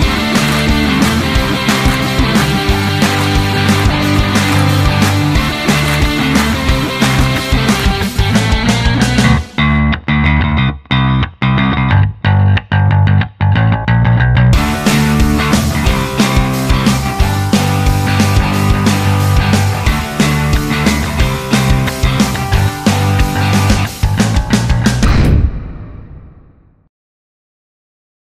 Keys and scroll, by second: 4.3-5.8 typing.